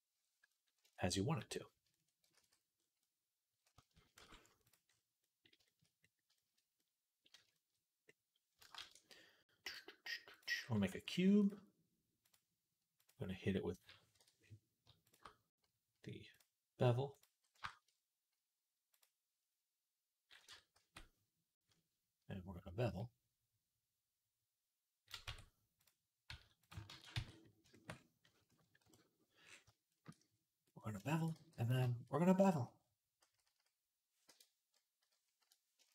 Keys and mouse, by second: 0.4-2.9 shift+drag, 2.2 ctrl+s, 3.6 shift+click, 3.9 shift+click, 4.0 shift+c, 4.5-8.0 middle drag, 8.6 shift+a, 10.4-12.8 middle drag, 10.7 s, 12.8-15.0 drag, 14.0 Escape, 15.0-16.2 shift+middle drag, 16.2-17.7 drag, 20.3 Tab, 20.6 a, 25.1 Tab, 26.1 s, 26.7 ctrl+a, 27.5-30.6 shift+middle drag, 28.7 KP_1, 30.6-31.6 shift+drag, 31.2 g, 31.6 shift+middle click, 32.6-35.9 drag, 33.3 s.